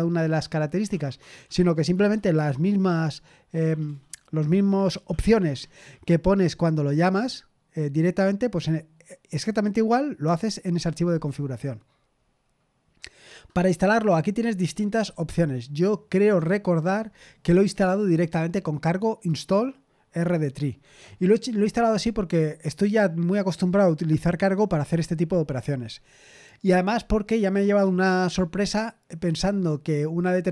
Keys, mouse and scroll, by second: 12.1-12.9 scroll down 1, 12.9-14.5 scroll down 1, 14.5-15.3 scroll down 1, 15.3-17.1 scroll down 1, 17.1-17.6 scroll down 1, 17.6-26.6 scroll up 1.